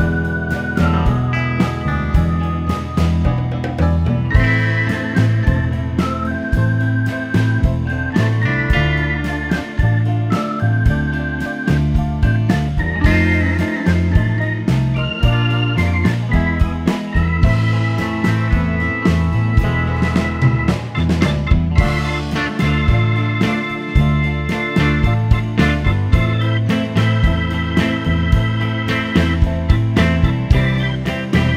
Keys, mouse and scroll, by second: 7.8-31.5 drag.